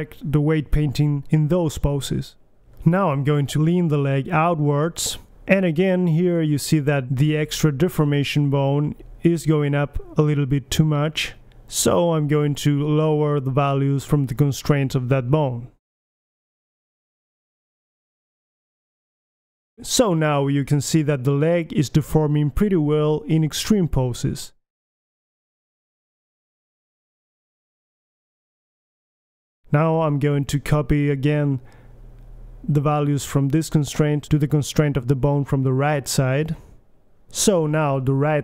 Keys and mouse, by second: 0.6 KP_1, 1.0 middle drag, 1.1 g, 3.1 click, 3.5 middle click, 3.8 KP_1, 4.3 click, 4.6-5.8 drag, 5.3 g, 7.3-9.6 middle drag, 10.2 click, 10.6 BackSpace, 10.6 BackSpace, 11.4-14.8 middle drag, 15.1-15.6 middle drag, 15.6 KP_1, 17.1 middle click, 19.0 KP_1, 19.2 middle click, 19.9-20.6 drag, 20.2 KP_1, 20.6-21.6 middle drag, 21.1 g, 24.5-25.7 drag, 25.1 g, 26.7-27.6 middle drag, 27.2 g, 29.5-30.3 middle drag, 30.3 alt+g, 30.5 KP_1, 31.2-32.4 drag, 32.9-34.1 right drag, 34.1-35.5 drag, 34.7 BackSpace, 35.8-38.0 middle drag, 37.2 g, 38.1-38.4 drag, 38.3 g.